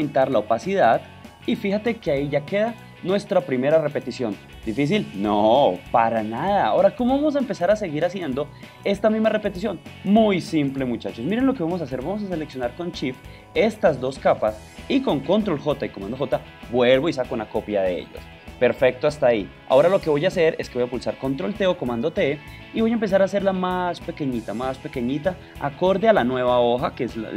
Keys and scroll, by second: 16.7 super+j, 21.7 super+t, 22.7 shift+super+t, 25.4 alt+shift+space.